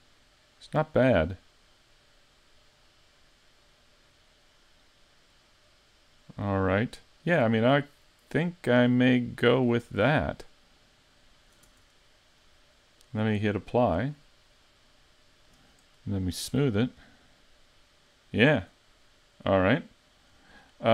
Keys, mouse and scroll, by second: 9.9 Tab, 10.3 middle click, 11.7 Tab, 12.4 middle click, 14.0 click, 14.7 middle click, 16.5 click, 17.0 middle click, 20.5 scroll up 2.